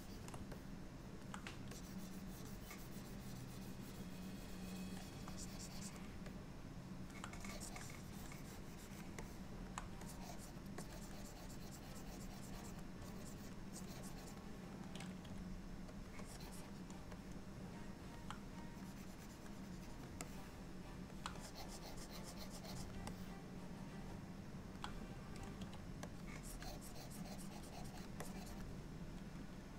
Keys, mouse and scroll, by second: 0.6 middle click, 1.8 click, 6.4 middle click, 7.6 click, 9.3 alt+middle click, 10.1 click, 10.8 click, 13.1 click, 13.8 click, 15.3 f, 16.3 click, 17.2 middle click, 18.8 click, 19.6 click, 20.3 middle click, 21.5 click, 23.2 middle click, 25.7 f, 26.5 click, 28.3 click.